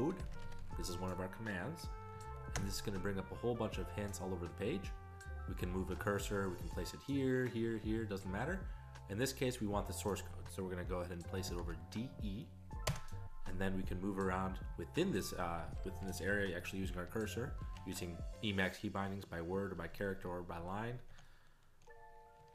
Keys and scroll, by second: 0.0-0.6 typing, 2.3-3.0 typing, 11.4 typing, 12.9 Return, 12.9 typing, 15.1 ctrl+f, 15.4 ctrl+f, 15.9 ctrl+f, 16.1 ctrl+f, 16.3 ctrl+f, 17.1 alt+b, 19.5 alt+f, 19.8 alt+b, 20.6 ctrl+b.